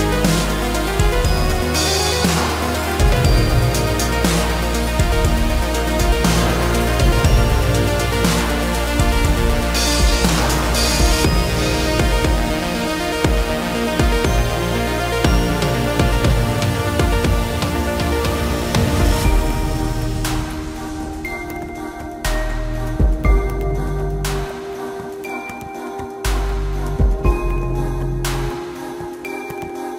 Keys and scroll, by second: 6.0 ctrl+z, 7.4 space, 18.4 shift+space, 18.5 Escape.